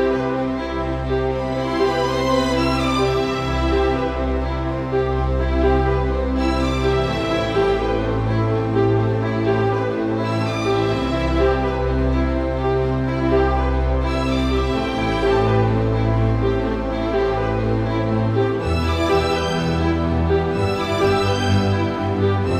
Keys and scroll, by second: 15.6 super+c.